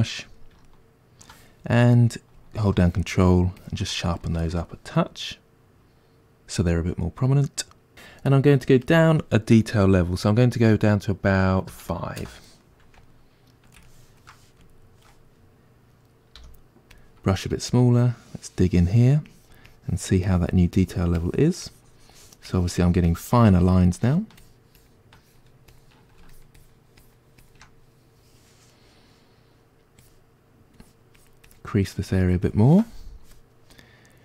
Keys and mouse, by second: 2.8-4.2 ctrl+drag, 4.2-18.0 ctrl+middle drag, 16.4 f, 18.0-34.2 drag.